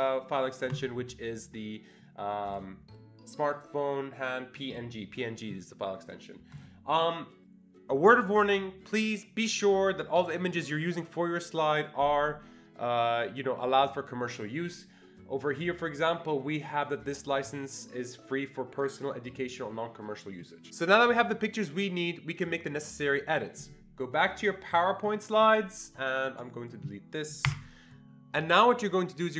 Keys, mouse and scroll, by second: 0.0 click, 0.8 click, 2.5 click, 4.5 click, 4.7 double click, 6.5 click, 24.4 click, 25.0 click, 26.2-28.0 drag, 27.5 Delete.